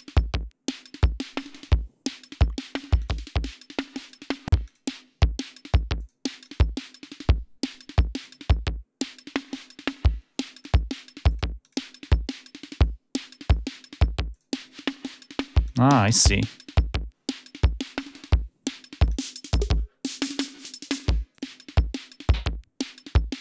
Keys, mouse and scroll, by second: 2.1 click, 2.4 click, 2.8 click, 3.8 click, 4.5 click, 5.8 click, 6.3 click, 7.5 click, 8.0 click, 9.3 click, 10.4 click, 11.1 click, 11.4 click, 12.5 click, 14.1 click, 15.5 click, 18.8 click, 21.2 click.